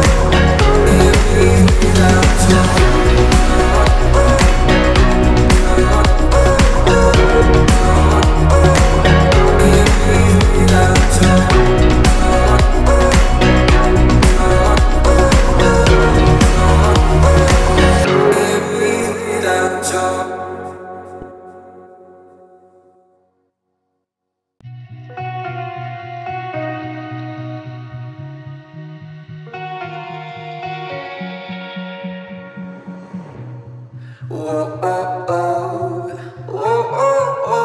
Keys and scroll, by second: 5.4 p, 7.0 1, 7.2 Return, 7.4 space, 11.3 t, 14.3 1, 14.5 Return, 14.8 space, 17.3 l, 21.7 space, 23.0 space, 26.2 p.